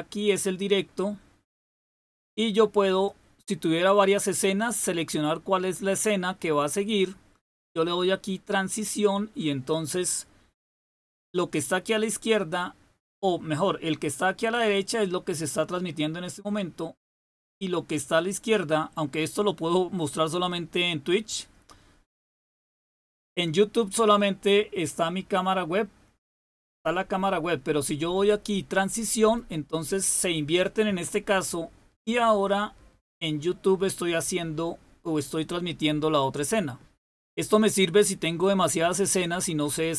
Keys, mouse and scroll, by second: 2.9 click, 29.1 click.